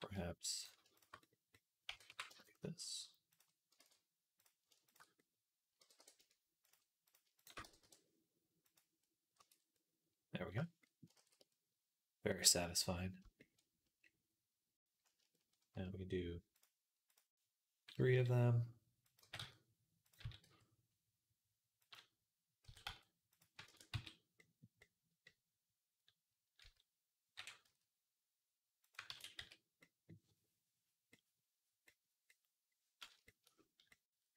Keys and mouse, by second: 0.6-6.0 shift+right drag, 0.8 shift+click, 1.7 g, 3.6 ctrl+z, 5.6 g, 6.9 click, 6.9 middle click, 6.9 right click, 7.2 shift+click, 7.2 shift+middle click, 7.2 shift+right click, 7.5 g, 8.8-10.2 right drag, 9.2 Tab, 10.2-12.7 shift+drag, 11.0 ctrl+s, 18.0 s, 19.0 g, 20.0 s, 22.5 s, 23.5 ctrl+a, 26.4 s, 28.9 ctrl+a, 30.9-32.4 drag, 33.4 click, 33.8 click, 34.0 click, 34.1 right click, 34.3 click.